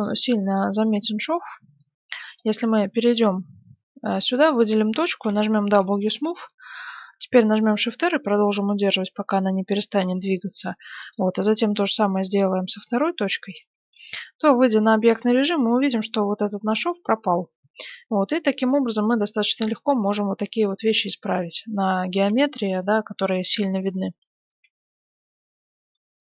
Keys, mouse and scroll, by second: 0.1-2.0 drag, 0.9 Tab, 1.6 right click, 2.0 middle click, 2.4 click, 2.4 right click, 3.6 middle click, 4.1-5.2 middle drag, 5.2 w, 6.7-13.6 shift+r, 11.1-13.0 drag, 13.0 middle click, 13.9 Tab, 15.6 click, 16.0-18.7 middle drag, 19.5-20.9 middle drag, 21.4-23.5 middle drag, 23.6-26.0 middle drag.